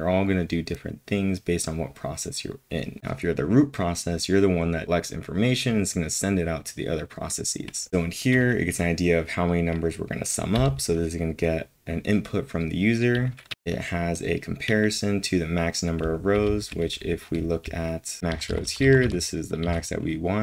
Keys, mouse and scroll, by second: 10.5 typing, 13.5 typing, 14.8-20.4 typing.